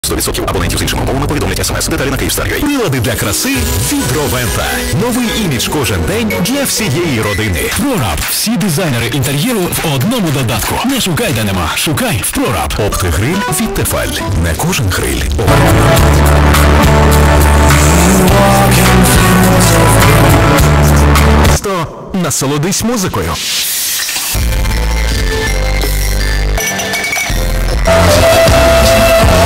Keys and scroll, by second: 0.1 ctrl+q, 3.9 i, 4.0 Down, 4.2 Down, 4.4 Down, 4.5 Down, 5.2 Down, 5.8 Down, 5.8 Return, 21.6 Page_Down.